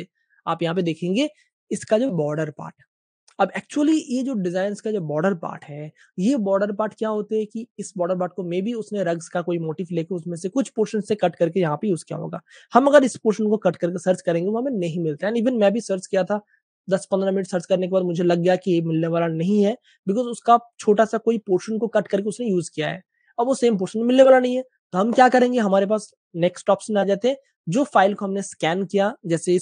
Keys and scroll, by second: 2.9 typing, 3.2 super+space, 3.2 super+space, 4.6 typing, 5.5 super+space, 7.3 typing, 16.2 typing.